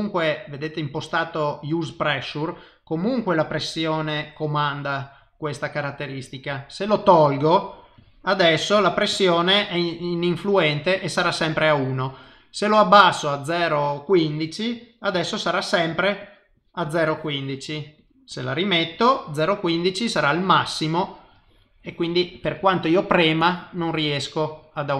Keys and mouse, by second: 3.0 click, 6.3 click, 7.5 click, 8.0 click, 8.4 click, 8.8 click, 9.1 click, 12.0 click, 14.3 click, 15.1 click, 15.9-20.8 click, 21.8 click.